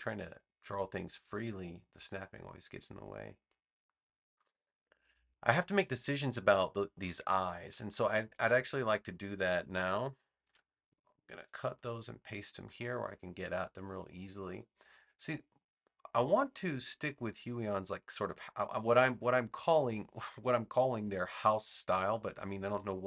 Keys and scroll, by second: 6.4 space, 10.4 super+x, 11.9 super+v, 21.2 v.